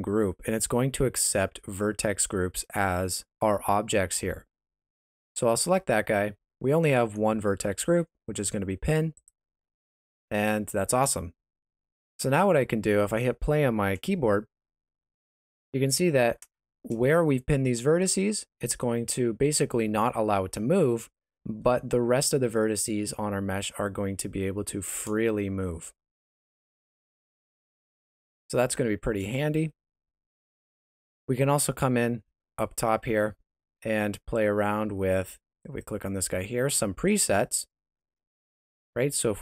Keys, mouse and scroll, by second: 5.3 click, 12.0 Escape, 14.4 space, 15.5 middle click, 16.6 shift+z, 21.6 middle click, 28.6 Escape, 30.2 middle click, 32.2 middle click, 35.6 click.